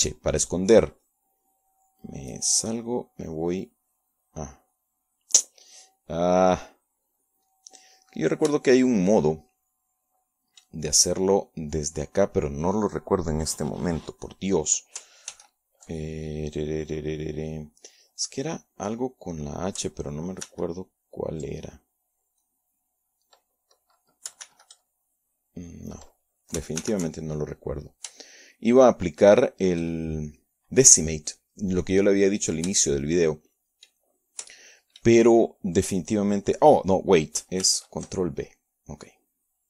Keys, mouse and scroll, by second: 0.7 click, 3.0 click, 3.4 click, 4.6 shift+click, 5.5 shift+click, 7.1-9.0 drag, 11.3 ctrl+f, 16.4 ctrl+h, 18.4 click, 20.4 shift+h, 22.8 alt+h, 24.4 shift+click, 28.8-29.9 shift+drag, 30.6 shift+click, 33.6 ctrl+b, 35.8-37.7 drag, 39.4 h.